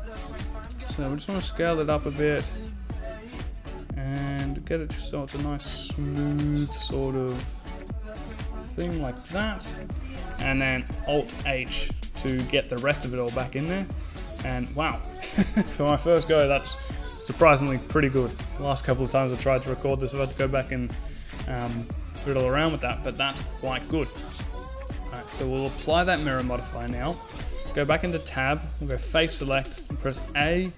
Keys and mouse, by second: 9.0 a, 10.0 alt+h, 11.2 a, 12.0 Tab, 24.4-26.3 drag, 26.6 Tab, 28.1 click, 28.6 a, 29.3 click.